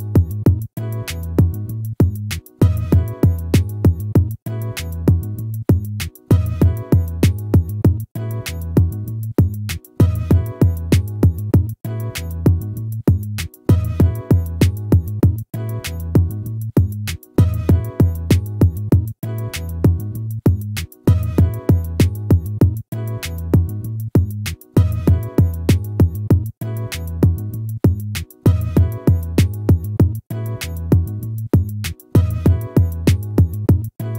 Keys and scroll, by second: 12.8 ctrl+-, 16.5 ctrl++.